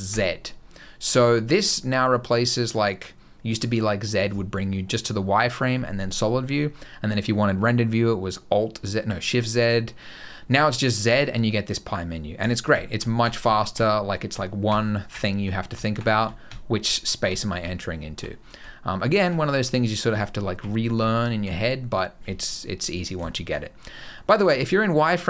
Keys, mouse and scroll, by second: 12.6-18.0 typing, 19.1 z, 19.9 z, 20.8 z, 22.4-22.8 scroll up 3, 23.1 shift+middle click, 23.6 scroll down 1, 23.8 middle click, 24.1-24.6 scroll up 3, 24.6 middle click, 24.9 scroll down 1.